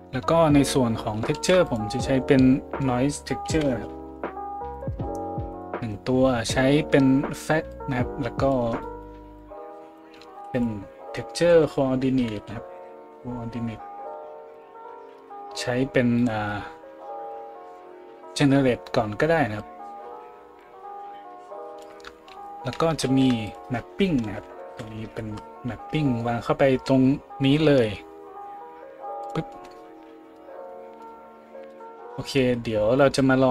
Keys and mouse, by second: 1.3 shift+a, 5.6-7.7 middle drag, 7.7-15.2 drag, 10.3 shift+a, 12.3 r, 15.2-17.4 middle drag, 17.4-29.3 drag, 23.0 shift+a, 24.8 p, 29.3-33.5 middle drag.